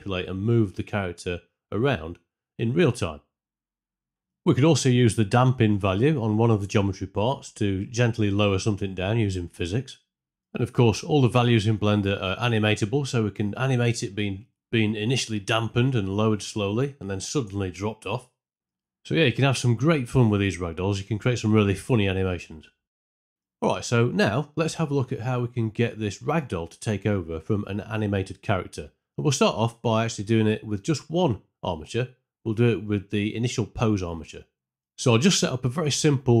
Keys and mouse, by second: 0.0 r, 1.2 g, 4.1 Escape, 4.5 click, 5.9 shift+middle click, 6.5 space, 9.7 space, 9.9 shift+Left, 10.4 BackSpace, 10.5 click, 11.1 click, 11.4-14.9 typing, 11.8 click, 14.2 shift+Left, 14.4 middle click, 16.0 ctrl+space, 21.4 ctrl+middle drag, 23.0 shift+Left, 23.0 space, 26.1 click, 26.3 x, 26.8 ctrl+space, 27.1 click, 28.2 alt+g, 34.7-36.4 typing, 34.8 shift+middle click, 35.1 Tab.